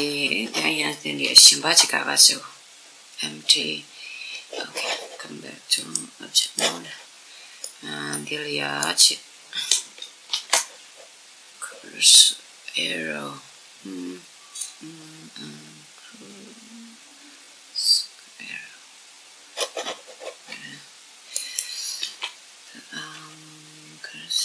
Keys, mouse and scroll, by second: 1.2 shift+a, 5.5 click, 6.8-9.1 middle drag, 8.5 right click, 9.7 shift+a, 21.0 right click, 21.7 shift+a.